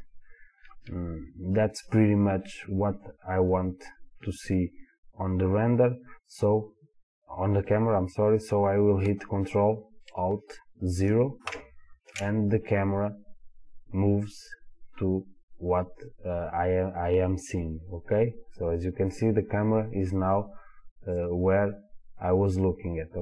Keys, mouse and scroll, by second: 11.5 ctrl+alt+KP_0, 19.5-21.2 scroll down 2, 21.2 click.